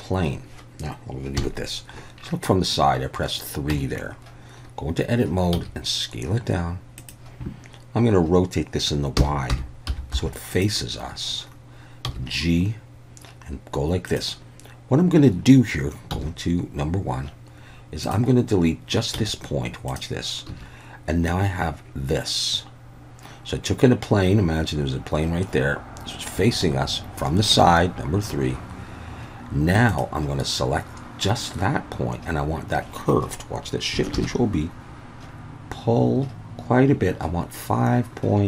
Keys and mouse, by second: 1.4 KP_3, 3.7 Tab, 5.5 s, 7.0 click, 9.2 r, 9.5 y, 9.9 9, 10.1 0, 10.5 click, 12.1 g, 14.1 click, 16.1 1, 19.2 x, 20.5 a, 29.9 click, 34.2 ctrl+shift+b.